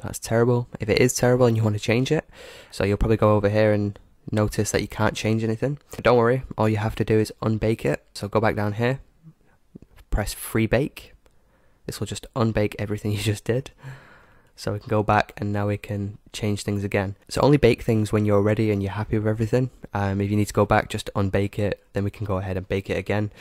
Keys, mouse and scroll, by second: 2.4 scroll up 1, 2.6 middle click, 2.8-3.2 scroll down 1, 3.2-5.1 middle drag, 5.1-5.7 scroll up 1, 5.7-6.0 scroll down 1, 6.0-7.9 middle drag, 7.9 scroll down 1, 10.8-13.9 drag, 14.5-17.7 drag, 16.9-20.7 middle drag, 20.9-23.4 middle drag.